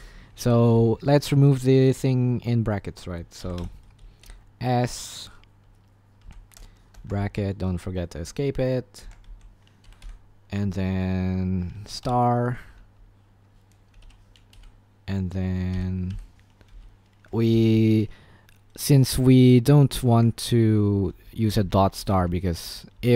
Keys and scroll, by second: 0.0-1.0 typing, 2.9-4.2 typing, 6.2-7.1 typing, 9.0-9.9 typing, 14.0-18.1 typing, 19.9-23.1 typing.